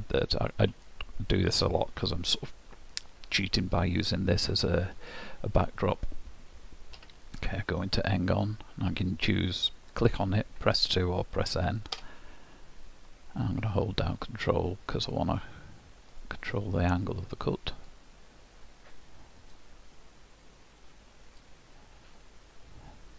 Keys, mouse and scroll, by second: 0.0 scroll up 2, 0.9 shift+middle click, 5.3-7.0 scroll up 1, 7.0 d, 15.4 ctrl+click.